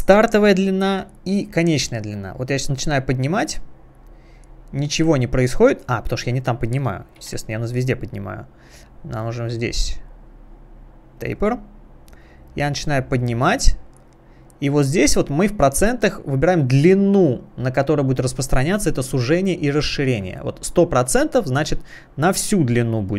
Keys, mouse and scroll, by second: 2.5 click, 5.8 click, 7.2 ctrl+z, 8.6 scroll down 1, 9.2 scroll down 1, 9.8 scroll down 1, 11.2 click, 11.9 scroll down 1, 13.2 click, 21.6 click.